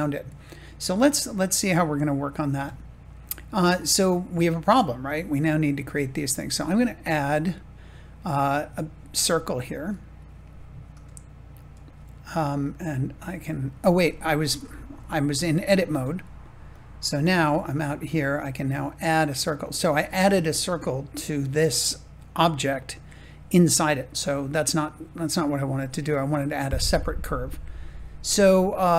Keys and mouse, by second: 2.7 shift+middle click, 5.1 shift+middle click, 7.5-11.0 drag, 11.1 shift+middle click, 14.4 ctrl+z, 15.8 Tab, 19.5-20.9 drag, 26.0-28.9 drag.